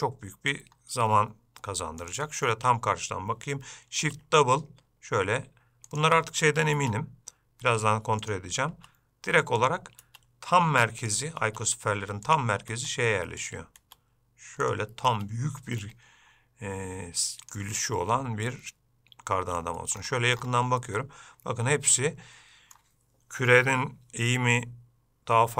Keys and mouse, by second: 0.0 middle click, 2.2 click, 4.2 shift+d, 7.0 shift+d, 8.9 shift+d, 10.2 shift+d, 11.6 shift+d, 12.9 shift+d, 14.0 shift+d, 15.3 shift+d, 18.7-19.8 middle drag, 21.0-23.0 middle drag.